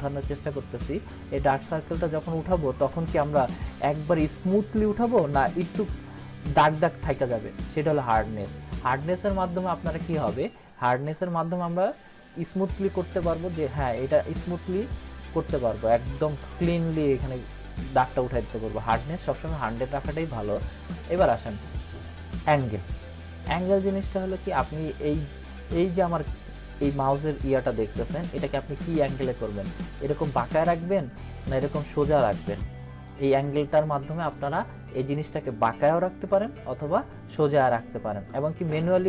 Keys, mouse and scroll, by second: 1.6 scroll up 1, 3.2 ctrl+-, 9.0-13.5 drag, 18.8-19.7 drag, 28.8-30.4 drag, 32.4-33.4 drag, 36.3-37.5 drag.